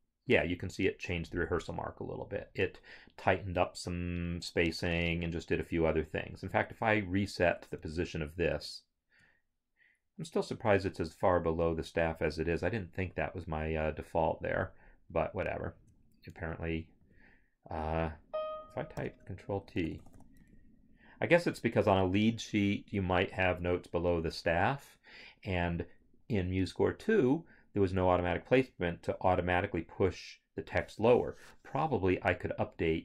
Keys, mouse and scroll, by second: 5.4 scroll, 6.5 click, 8.4 ctrl+r, 15.3 ctrl+Up, 17.0 Escape, 18.1 click, 18.9 ctrl+t, 19.6 s, 20.4 Escape.